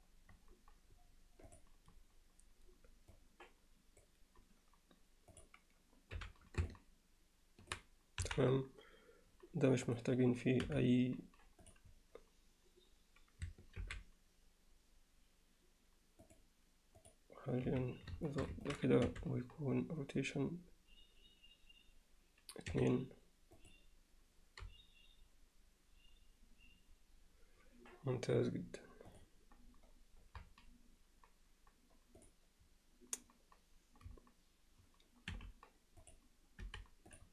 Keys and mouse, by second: 3.1-4.1 drag, 5.3 click, 6.2 h, 6.7-7.7 middle drag, 8.2 KP_1, 10.6 m, 13.8 alt+h, 16.3 click, 17.0 click, 17.7 z, 18.3 alt+shift+middle drag, 18.7 ctrl+alt+middle click, 19.5 r, 25.1 g, 36.1 click, 36.6 m.